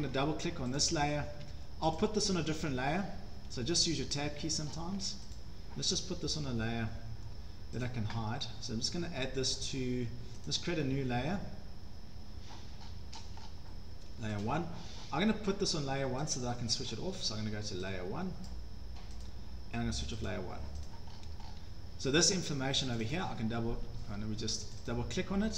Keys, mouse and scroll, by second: 0.1 Escape, 0.8 click, 1.3 Escape, 1.5 Escape, 2.0 click, 2.6 Escape, 2.7 Escape, 3.6 Tab, 4.0 Tab, 4.3 Tab, 4.7 scroll down 7, 4.9 Escape, 5.2 scroll, 5.3 click, 6.3 scroll down 7, 7.8 click, 8.2 scroll, 12.8-13.6 scroll down 19, 14.4 click, 16.4 click, 16.4 scroll down 1, 18.5 click, 19.2 click, 20.3 click, 20.9 click, 21.0 Escape, 21.2-21.6 scroll down 11, 21.6 Escape, 22.2 click, 23.0 click, 23.1 click, 23.9 Escape, 24.1 Escape, 24.8 click, 24.9 click.